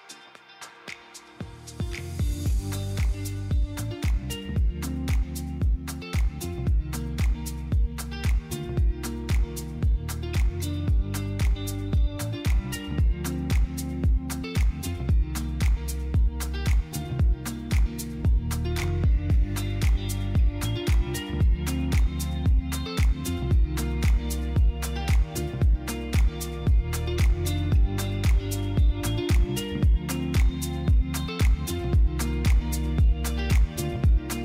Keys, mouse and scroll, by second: 3.1 KP_3, 4.0 r, 4.4 x, 6.0 click, 6.8 z, 8.2 click, 9.4 KP_7, 10.9 shift+d, 11.2 r, 11.5 z, 15.2 click, 17.2 shift+d, 18.4 r, 18.8 z, 21.7 click, 23.1-24.0 typing, 25.4-27.5 drag, 30.3 KP_7, 31.4 click, 32.0 KP_3, 33.7 shift+d, 34.0 z.